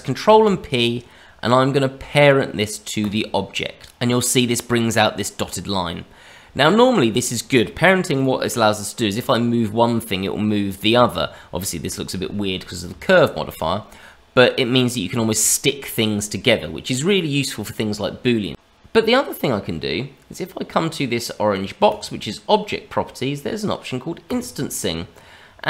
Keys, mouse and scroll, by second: 0.2 ctrl+p, 3.8 click, 5.3 middle click, 6.3 click, 6.5 middle click, 6.8 click, 7.3 middle click, 9.1 g, 13.0 shift+middle click, 18.5 click, 21.8 click, 23.0-24.2 scroll down 2, 24.2 click, 24.2 scroll down 1.